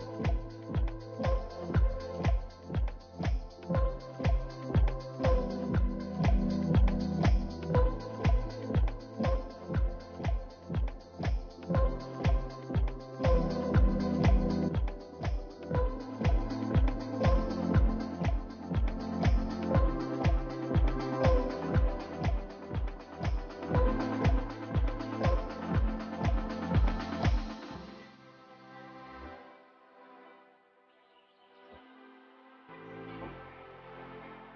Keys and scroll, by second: 19.9 ctrl+space, 29.3 ctrl+space.